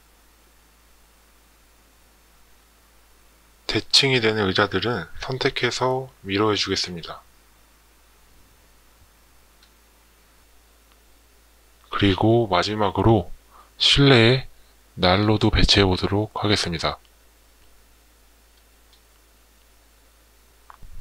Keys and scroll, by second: 1.7 Escape, 17.1 space, 17.7 space.